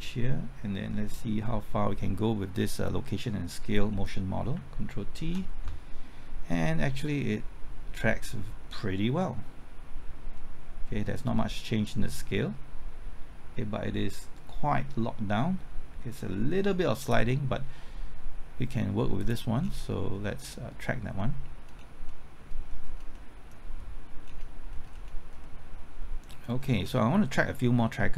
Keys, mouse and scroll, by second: 3.9 scroll down 1, 4.5 typing, 5.5 ctrl+t, 7.0-18.0 drag, 19.6-20.1 scroll down 1, 20.1-21.2 scroll up 1, 21.2 middle click, 21.8 scroll down 1, 22.1 middle click, 22.6 scroll up 1, 23.1 middle click, 24.2-24.7 scroll down 1, 24.7-25.4 scroll up 1, 25.4 middle click, 25.9-26.3 scroll up 1, 26.3 middle click, 26.8-27.2 scroll down 1, 27.2-28.1 scroll up 1.